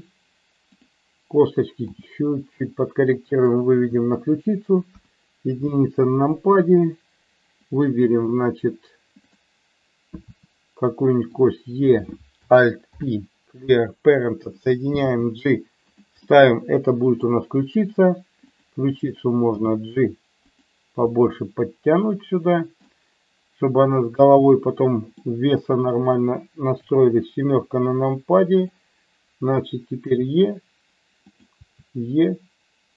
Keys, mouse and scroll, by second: 0.7 click, 2.0 g, 3.3 click, 4.8 KP_1, 9.3 click, 10.3 e, 11.3 click, 11.8 click, 13.0 alt+p, 15.1 g, 16.2-17.3 middle drag, 18.4 click, 19.6 g, 20.6 click, 21.1-22.8 middle drag, 24.5 middle click, 26.7 KP_7, 28.6 click, 29.9 e, 31.2 click, 31.6 e.